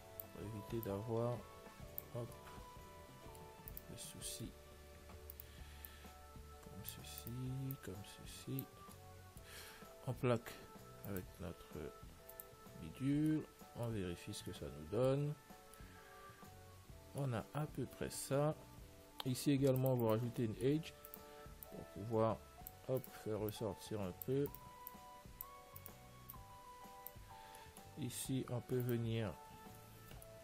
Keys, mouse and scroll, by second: 1.1 click, 2.6-6.0 middle drag, 4.0-6.1 right drag, 7.2 click, 7.9 right click, 8.9 click, 8.9 right click, 9.1-11.2 middle drag, 11.4-14.3 drag, 13.3-19.7 middle drag, 14.3 Tab, 17.9 Tab, 19.7 ctrl+r, 20.7-22.5 middle drag, 21.4-23.1 right drag, 21.9 click, 23.3 right click, 23.7 right click, 27.7 right click, 28.2 click, 28.2-29.7 middle drag, 29.1-30.4 right drag.